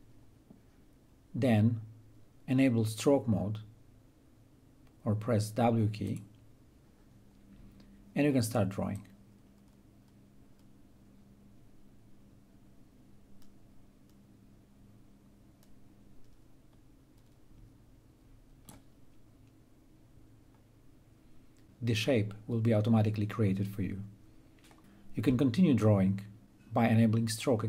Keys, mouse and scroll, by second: 5.7 click, 8.5-20.5 drag.